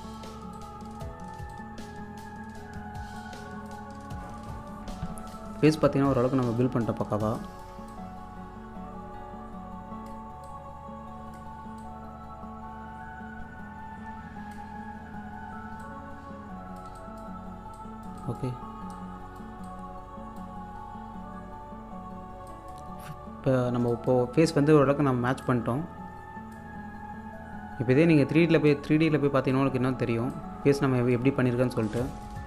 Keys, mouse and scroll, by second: 3.9-4.7 scroll down 1, 4.9-5.3 scroll up 1, 5.3-7.1 drag, 7.1 alt+scroll down 1, 7.4-15.5 alt+drag, 15.8-21.5 drag, 21.8-22.4 scroll down 1, 22.5 click, 24.3-25.0 scroll up 1, 25.5-26.8 drag, 26.8-27.1 scroll down 1, 28.7-31.3 drag, 31.3-31.9 scroll down 1, 31.9 click, 32.4 scroll down 1.